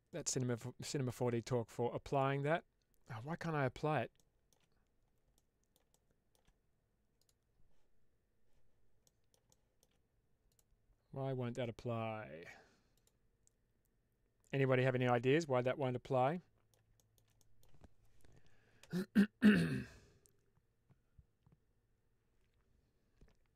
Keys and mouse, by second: 0.1 click, 2.0-2.9 drag, 4.0-4.4 shift+middle drag, 5.2-5.6 middle drag, 5.9-6.3 shift+middle drag, 7.1 click, 8.9 middle drag, 9.4-9.8 shift+middle drag, 13.3-14.8 drag, 15.3-16.7 middle drag, 16.8 shift+middle click, 17.2 middle click.